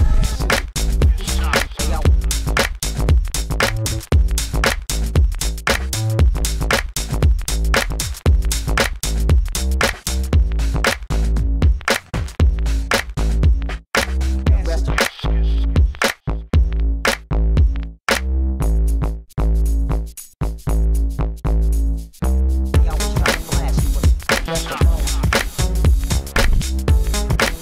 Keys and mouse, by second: 0.0 g, 2.0 alt+z, 2.2 Tab, 2.7 alt+z, 3.0 alt+z, 4.2 Tab, 6.5 b, 7.1 g, 8.6 g, 9.1 Tab, 12.0 Tab, 12.7 click, 13.5 g, 13.5-15.0 drag, 15.2 Tab, 15.7 Tab, 16.1 g, 16.8 Tab, 17.1 ctrl+s, 17.9 Tab, 18.1 a, 18.1 a, 18.3 ctrl+f, 18.9 KP_1, 19.8 click, 21.2 Tab, 23.2 ctrl+s, 25.7 a, 26.1 ctrl+s, 26.8 click.